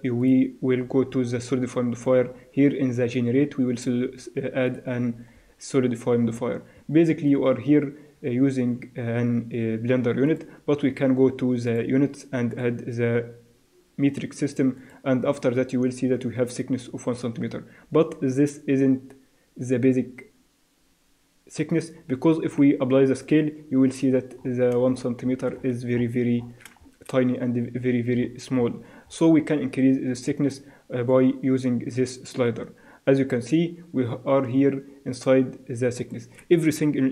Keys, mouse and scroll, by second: 5.7-10.3 middle drag, 10.3-13.5 drag, 13.5 click, 14.8-16.6 drag, 22.4 ctrl+a, 24.4-31.1 middle drag, 31.1-32.9 drag.